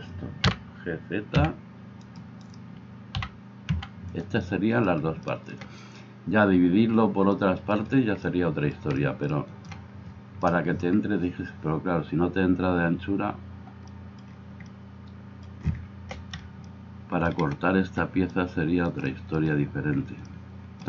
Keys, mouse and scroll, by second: 0.4 g, 2.5-20.8 right drag, 3.1 g.